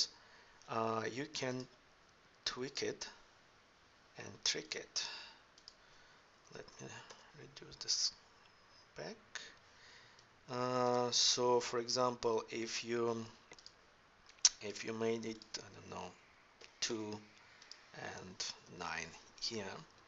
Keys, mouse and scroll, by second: 10.7 right click, 10.9 right click.